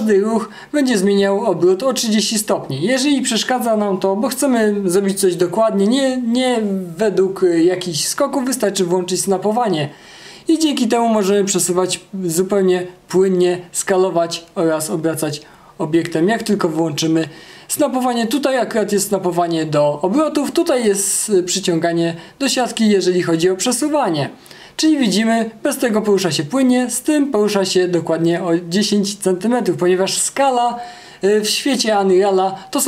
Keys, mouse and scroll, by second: 20.5-21.2 typing, 23.6 w.